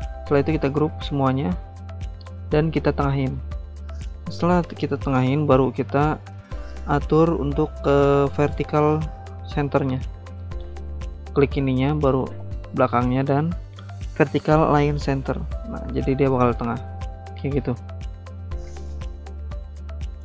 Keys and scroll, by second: 0.6 ctrl+g.